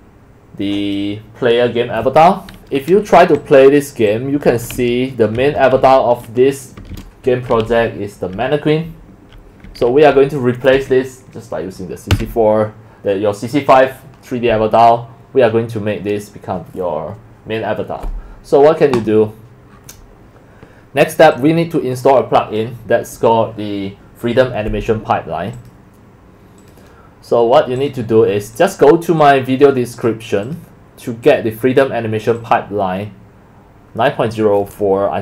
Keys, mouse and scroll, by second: 3.4 click, 4.1 click, 4.3-10.3 typing, 10.2 right click, 11.2 right click, 11.9-13.0 typing, 14.7 click, 15.3 click, 25.5 click, 28.5 click, 29.2 click, 29.9 click, 30.4 click, 31.2 click, 32.2 click, 32.4 click.